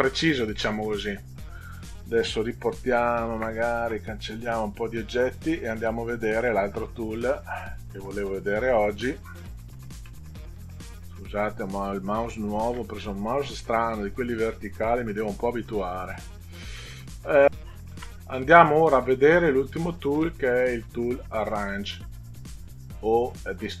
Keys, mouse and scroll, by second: 0.3 middle click, 5.1 click, 5.6 Delete, 6.4 click, 7.2 Delete, 7.5 click, 8.8 click, 10.0 scroll up 2, 10.1 middle click, 11.5 click, 12.9 scroll down 2, 13.5 middle click, 20.1 click.